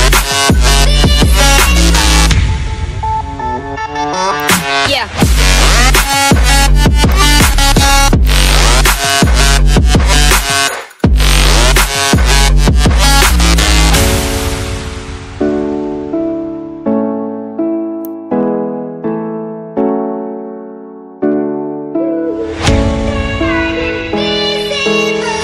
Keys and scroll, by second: 1.8 ctrl+z, 2.5 ctrl+z, 22.3 ctrl+alt+shift+e.